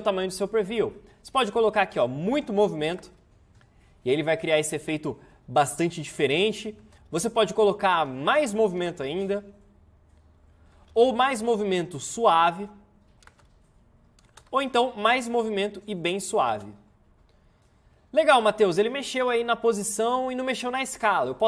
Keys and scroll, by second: 3.0 space, 6.3 space, 7.0 ctrl+z, 8.8 space, 10.9 ctrl+z, 13.3 space, 14.4 ctrl+z, 16.4 space.